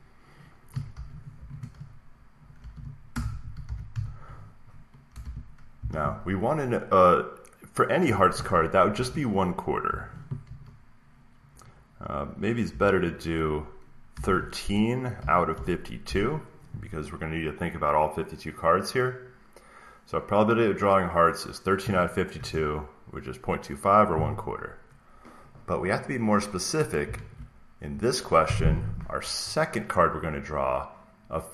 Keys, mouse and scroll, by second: 0.6-8.2 typing, 9.8 typing, 10.4 Right, 12.6 typing, 13.8-16.0 typing, 22.2 Return, 27.1 alt+Tab.